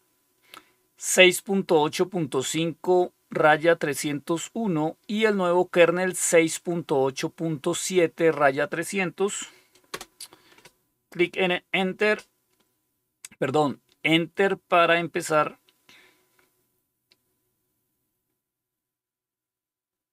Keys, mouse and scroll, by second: 9.8 Return.